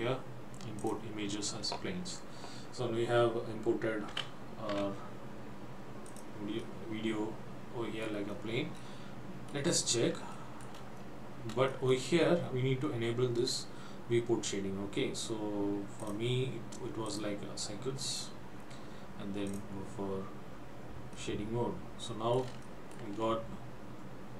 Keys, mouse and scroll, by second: 0.8 click, 6.7 middle click, 8.5-8.9 scroll up 3, 8.9 middle click, 9.9-10.2 scroll up 1, 10.4 shift+middle click, 11.1 scroll up 1, 11.9 shift+middle click, 15.3-16.2 scroll up 3, 16.2 click, 17.1 click.